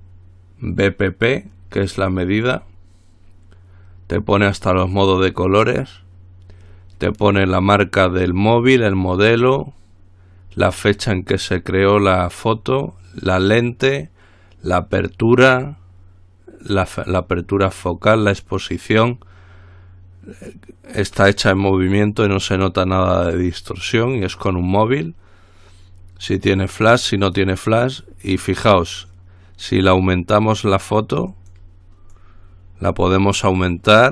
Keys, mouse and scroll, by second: 29.9-32.2 drag, 32.3-34.1 drag.